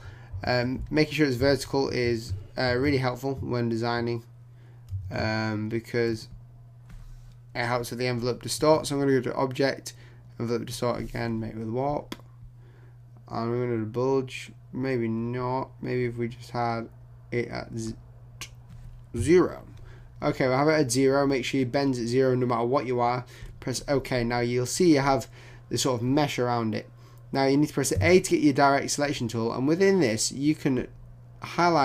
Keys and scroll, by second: 0.3 shift+super+z, 1.7 super+t.